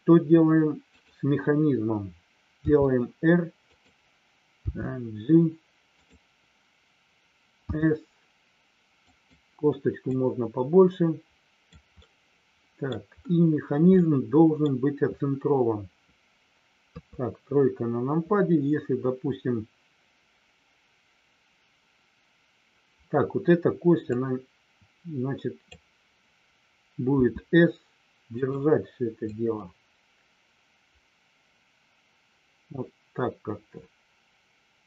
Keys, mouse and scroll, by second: 0.9 click, 3.5 click, 8.9 click, 10.1-11.7 drag, 12.1 middle click, 13.9 middle click, 16.9 KP_3, 24.1-25.7 drag, 28.4 click, 29.3-34.8 drag.